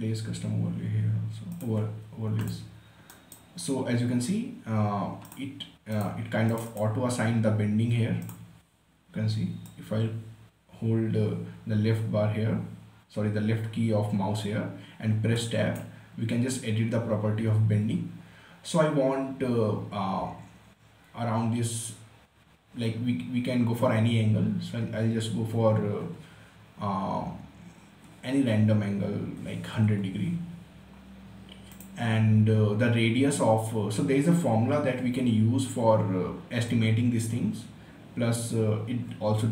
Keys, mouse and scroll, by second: 0.0 click, 3.5 right click, 3.9 scroll up 1, 5.2 scroll up 1, 5.6-15.7 drag, 15.7 Tab, 20.8-22.8 scroll down 1, 29.5-30.7 typing, 32.0 click.